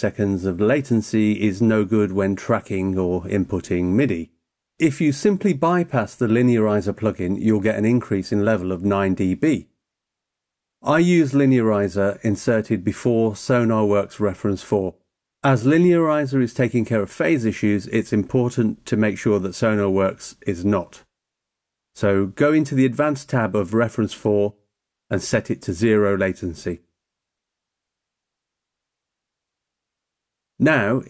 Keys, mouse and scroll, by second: 7.3 click, 9.2 click, 16.6 click, 21.9 click, 25.1 click, 26.2 click, 29.7 click.